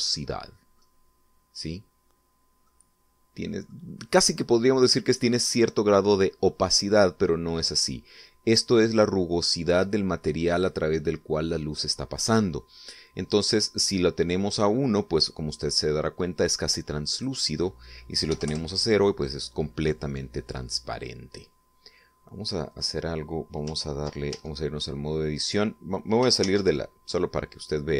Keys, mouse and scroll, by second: 0.1 scroll up 1, 0.7 middle click, 3.2-4.4 middle drag, 5.1-6.1 middle drag, 17.7 click, 18.9 0, 19.0 Return, 23.3 right click, 24.9 ctrl+Tab, 26.9 shift+z, 27.8 click.